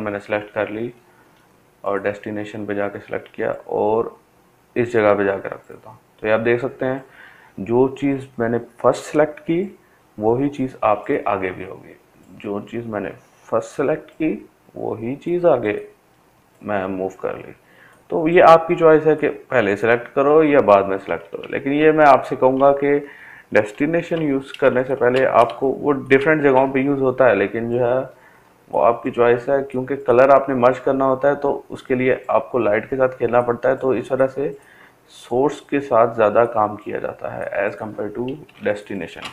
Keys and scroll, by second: 18.9 ctrl+alt+z, 19.4 ctrl+alt+z, 21.4 ctrl+d, 22.0 ctrl+space.